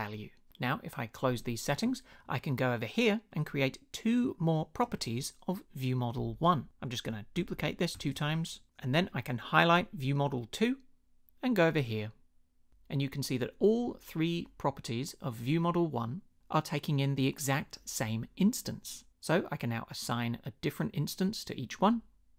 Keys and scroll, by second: 7.4 super+d.